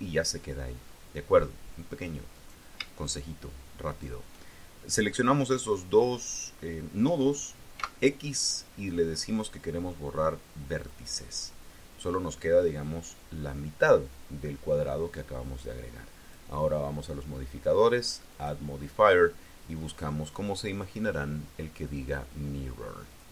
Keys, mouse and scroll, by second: 0.7 scroll up 2, 2.2 click, 3.7 shift+click, 7.6 x, 10.7 click, 16.1 click, 18.2 click, 22.9 click.